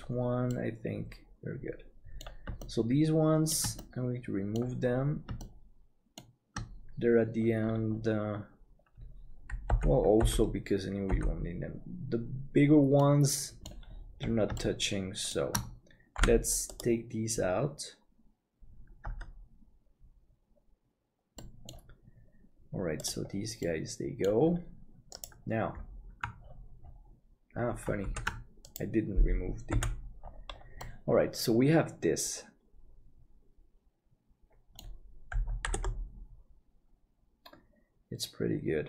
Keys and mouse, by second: 0.5-2.3 middle drag, 2.6 shift+middle click, 3.8 middle click, 5.5 shift+middle click, 9.7 l, 10.2 l, 13.1 middle click, 14.6 shift+middle click, 16.2 p, 20.8 Tab, 21.4 middle click, 23.6 middle click, 25.2 right click, 28.2 ctrl+s, 29.8 h, 30.2 middle click, 30.8-34.8 middle drag, 35.7 ctrl+KP_7.